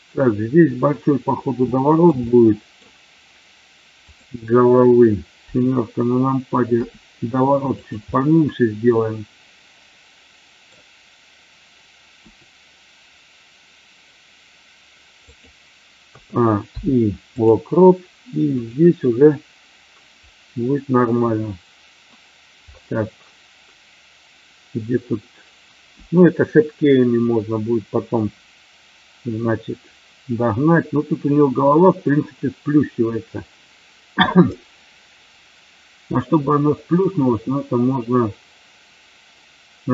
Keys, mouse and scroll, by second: 1.6-2.0 shift+middle drag, 2.1-2.7 middle drag, 4.0 click, 6.7 r, 8.0-10.6 middle drag, 12.1 r, 15.2 click, 16.0 a, 16.5 i, 18.5 click.